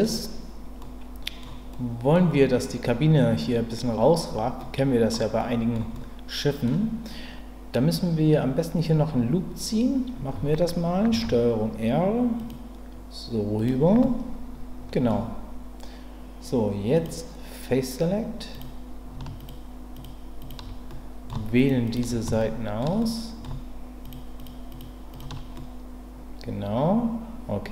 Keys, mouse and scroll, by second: 0.8 middle click, 1.7 middle click, 4.6 middle click, 5.4 middle click, 5.9 middle click, 11.1 ctrl+r, 13.5 click, 14.0-15.1 middle drag, 16.9 click, 19.4 shift+click, 19.9 shift+click, 20.4 shift+click, 20.9 middle click, 21.9 shift+click, 22.4 shift+middle click, 23.0 middle click, 24.7 shift+click, 25.1 shift+click, 25.5-27.7 middle drag.